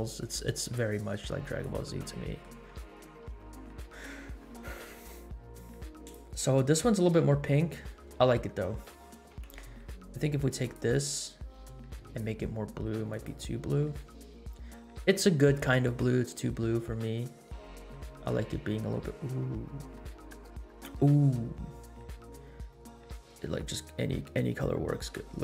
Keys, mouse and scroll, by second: 1.0-1.5 scroll down 3, 1.6 click, 2.2 middle click, 2.7 scroll up 3, 3.0-3.3 middle drag, 3.5 scroll up 1, 4.0 scroll down 2, 5.7-6.7 drag, 6.9 space, 9.3 space, 9.6 scroll down 2, 10.6 click, 12.0 click.